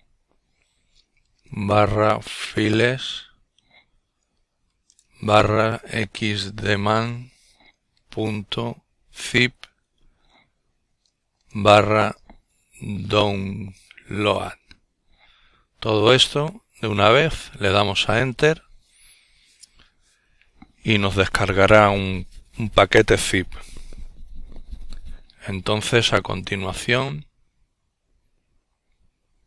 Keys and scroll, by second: 2.4-8.3 typing, 10.1-11.7 typing.